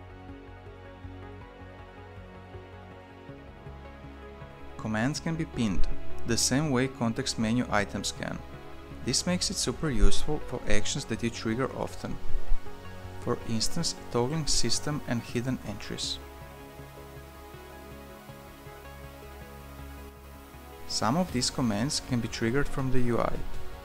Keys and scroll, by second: 6.4-7.8 typing, 10.2 ctrl+BackSpace, 14.5 ~, 15.4 ctrl+shift+p.